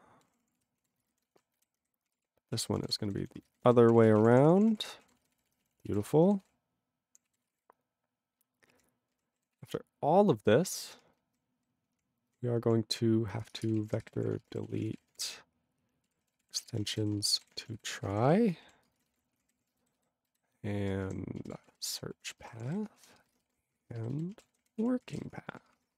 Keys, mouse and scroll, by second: 0.2 ctrl+w, 0.3 ctrl+p, 0.4 ctrl+p, 0.6 ctrl+e, 0.8 ctrl+a, 0.9 ctrl+space, 1.0 ctrl+n, 1.1 ctrl+n, 1.5 alt+w, 1.6 ctrl+n, 1.8 ctrl+y, 2.1 ctrl+p, 2.1 ctrl+e, 2.5 ctrl+a, 2.9 alt+p, 3.1 ctrl+n, 3.2 ctrl+n, 3.3 ctrl+space, 3.4 ctrl+n, 3.5 ctrl+n, 3.6 ctrl+w, 3.9 ctrl+p, 3.9 ctrl+e, 4.1 ctrl+space, 4.2 ctrl+a, 4.2 ctrl+p, 4.3 ctrl+p, 4.4 ctrl+p, 4.5 ctrl+p, 4.7 ctrl+p, 4.8 ctrl+g, 5.0 ctrl+a, 5.1 ctrl+space, 5.2 ctrl+e, 5.2 ctrl+n, 5.3 ctrl+e, 5.4 ctrl+n, 5.5 ctrl+e, 5.6 ctrl+n, 5.8 ctrl+e, 5.9 ctrl+n, 6.0 ctrl+e, 6.0 ctrl+g, 6.5 ctrl+s, 7.0 ctrl+p, 7.3 ctrl+a, 7.4 ctrl+space, 7.4 ctrl+e, 7.5 ctrl+g, 7.7-8.8 ctrl+n, 9.1 ctrl+n, 9.5 ctrl+s, 11.2 ctrl+n, 11.9 ctrl+p, 12.3 ctrl+n, 12.6 ctrl+p, 13.4-18.8 typing, 18.9 ctrl+space, 19.0 ctrl+n, 19.3 alt+w, 19.5 ctrl+p, 19.5 ctrl+y, 19.5 ctrl+p, 19.6 ctrl+e, 19.9 alt+b, 20.3 alt+b, 20.8 alt+d, 21.0 alt+d, 21.5-23.2 typing, 23.3 ctrl+n, 23.6 alt+w, 23.7 ctrl+y, 23.8 ctrl+p, 24.1 alt+b, 24.3 alt+d, 24.4-25.7 typing, 25.9 ctrl+g.